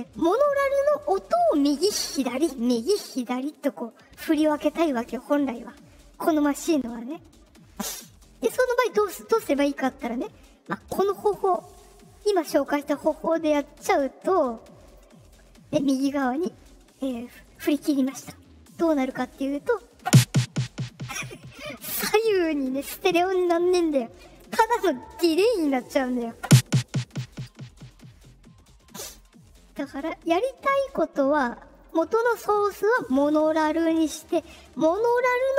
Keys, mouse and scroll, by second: 13.6-14.9 drag, 29.1-31.8 drag.